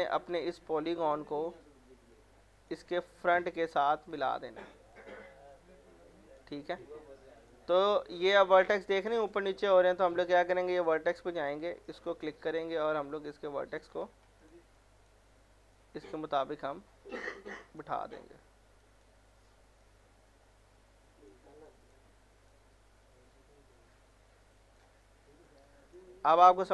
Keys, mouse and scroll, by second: 0.2 scroll up 1, 0.6 click, 1.3 middle click, 1.8-2.1 scroll up 1, 2.1 click, 2.8 middle click, 3.1-3.4 scroll up 1, 3.4 click, 4.4 scroll up 1, 4.7 middle click, 5.0-5.6 scroll down 1, 5.6 click, 6.6-6.9 scroll down 1, 7.4 click, 8.2 scroll down 1, 9.6 scroll up 1, 10.9 click, 12.1 scroll up 1, 13.1 click, 14.0 ctrl+z, 14.4-18.0 drag, 18.0 scroll down 1, 18.4-18.8 scroll up 1, 18.8-25.5 drag, 26.3 scroll up 1, 26.5 middle click.